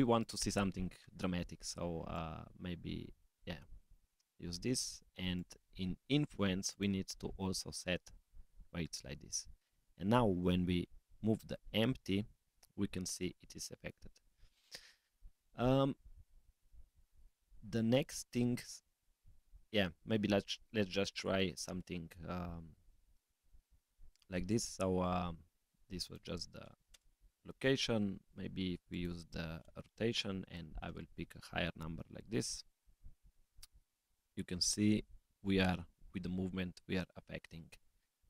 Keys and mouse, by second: 2.1-4.1 drag, 5.3 click, 6.7-8.2 drag, 9.7 click, 10.7 g, 18.2 click, 25.9-26.9 drag, 28.9-32.0 drag, 30.9 0, 32.7 click, 33.6 g.